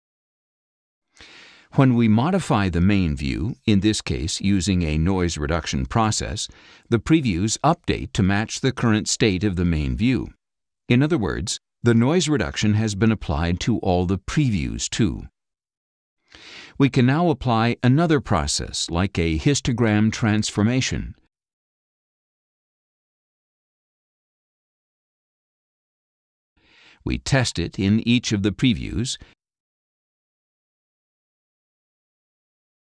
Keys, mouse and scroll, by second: 4.8-5.9 scroll down 6, 5.9 click, 6.9 click, 8.7 click, 9.6 click, 10.1 click, 10.7 click, 11.2 click, 11.9 click, 12.5 click, 16.7 click, 21.2 click, 22.9 click, 24.7-25.7 drag, 26.9-28.2 drag, 30.0 click, 31.9 click.